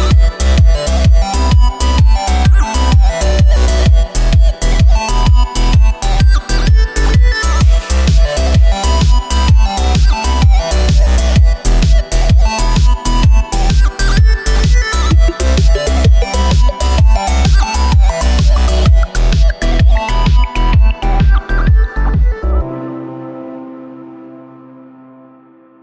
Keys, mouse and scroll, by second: 0.1 Tab, 0.4-0.8 scroll down 1, 0.8 g, 2.6 Tab, 3.0 middle click, 3.7-4.2 scroll up 2, 4.2 2, 4.7 right click, 5.1 shift+right click, 5.6 shift+right click, 6.0 shift+right click, 6.6 shift+right click, 6.9 shift+right click, 7.3 shift+middle click, 8.2 shift+right click, 8.5 shift+right click, 8.8 shift+right click, 9.1 shift+right click, 9.5-10.6 middle drag, 10.6 shift+right click, 11.0 shift+right click, 11.5 shift+right click, 11.8 shift+right click, 12.3-13.9 middle drag, 13.9 scroll up 2, 14.2 shift+middle click, 14.8-15.4 scroll up 1, 15.4-16.2 scroll up 3, 16.2 shift+right click, 16.9 shift+right click, 17.5 shift+right click, 18.1 shift+right click, 18.5 shift+right click, 19.1 shift+right click, 19.5 shift+right click, 19.8 shift+right click, 20.3 middle click, 20.8-21.5 scroll down 10, 21.8-22.9 middle drag, 22.9 ctrl+b, 24.3 middle click, 24.9-25.8 scroll up 3.